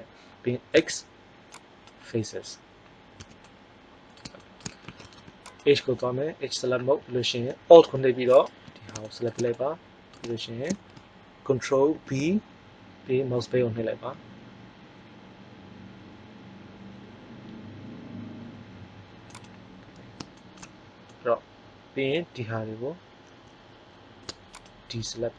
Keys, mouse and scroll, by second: 0.7 x, 3.1 z, 3.4 middle click, 5.1 ctrl+Tab, 8.3 right click, 9.0-10.1 middle drag, 11.8 ctrl+b, 19.5 click, 24.4-25.3 right drag.